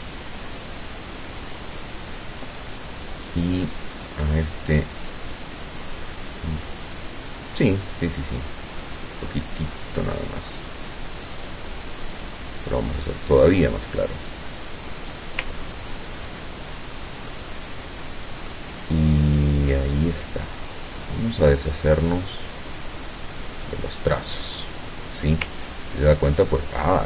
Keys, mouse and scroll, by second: 4.1 click, 9.0 click, 11.1 click, 12.2-13.7 drag, 14.6 click, 15.1 click, 15.6-15.9 ctrl+scroll up 1, 16.1-16.5 ctrl+scroll down 1, 17.3-18.7 ctrl+drag, 19.3 click, 20.3 click, 20.9 click, 22.1 click, 23.4 click, 25.7 ctrl+scroll up 2, 26.5-26.9 ctrl+scroll down 2.